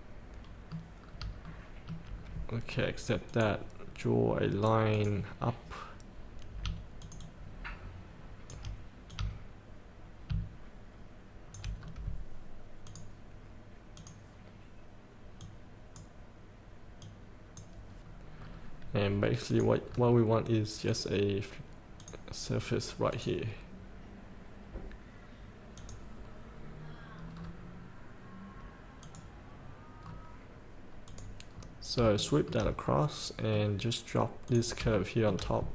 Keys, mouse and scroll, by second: 0.1-1.4 middle drag, 1.6 shift+middle click, 2.8-3.3 scroll down 1, 3.5 click, 5.8 scroll down 1, 7.2 shift+click, 9.3-11.7 drag, 12.0 scroll down 1, 13.0-16.7 drag, 17.3 click, 18.6 scroll up 1, 19.7 click, 20.0 scroll up 1, 21.0 click, 27.5 scroll down 1, 29.2 click, 30.2 scroll up 1, 31.2 click, 31.7 scroll up 1, 32.3 shift+middle click, 33.0-34.3 middle drag, 34.6 click, 35.1 shift+middle click.